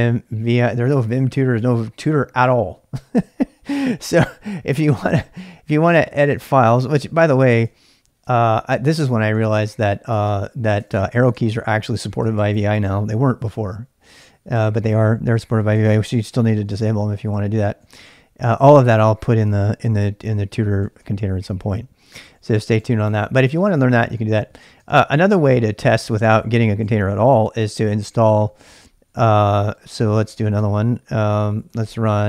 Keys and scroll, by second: 0.0-2.3 typing, 4.2-10.2 typing, 10.3 Return, 10.8 Return, 10.9 Return, 11.5 Up, 11.7 Up, 11.8 Up, 12.0-13.4 typing, 13.5 Right, 13.6 Right, 13.8 Up, 14.0 Up, 14.2 Right, 14.4 Right, 14.5 Right, 14.7 Right, 15.0 Left, 15.2 Left, 15.8 Down, 16.2 Down, 16.7 Up, 16.8 Up, 17.1 Down, 17.3 Down, 18.3-25.1 typing, 26.1-27.2 typing, 28.3-32.2 typing.